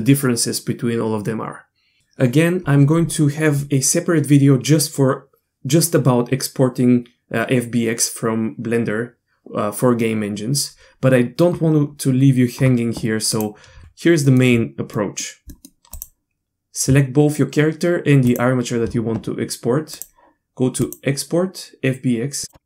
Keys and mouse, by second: 13.3 click, 13.8 Tab, 14.2 middle click, 14.9 middle click, 15.6 middle click, 15.9 click, 18.3 click, 19.9-22.5 drag, 22.5 Tab.